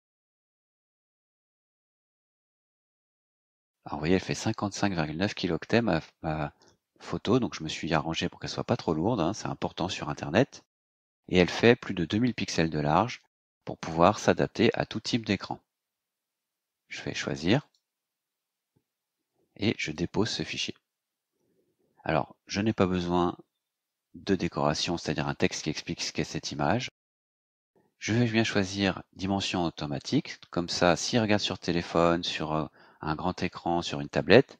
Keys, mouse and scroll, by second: 1.1 click, 2.3 click, 17.5 click, 19.7 click, 22.4 click.